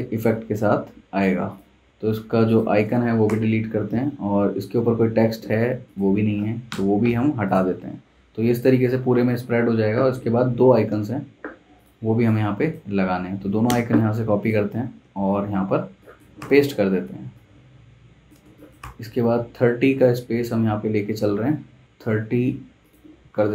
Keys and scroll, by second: 3.3 BackSpace, 6.7 BackSpace, 10.9 super+Tab, 13.4 super+c, 13.7 super+Tab, 15.0 super+v, 15.8 z, 16.4 v, 18.4 z, 18.8 v.